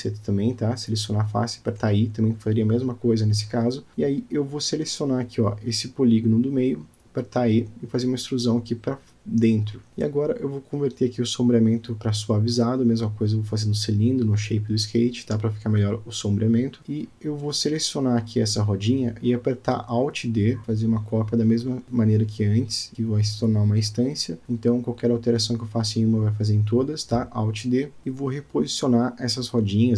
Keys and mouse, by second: 0.5 click, 1.7 e, 5.3 click, 5.8 middle click, 6.6 Tab, 7.0-7.4 drag, 8.7 click, 9.4 click, 9.6 right click, 10.2 click, 10.5 right click, 11.3 click, 11.7-12.1 middle drag, 12.8-13.6 middle drag, 14.1-14.9 middle drag, 15.3-15.9 shift+middle drag, 16.2 click, 17.3-17.9 shift+middle drag, 21.9-22.3 shift+middle drag, 22.6-23.0 drag, 23.8 alt+d, 29.1 click.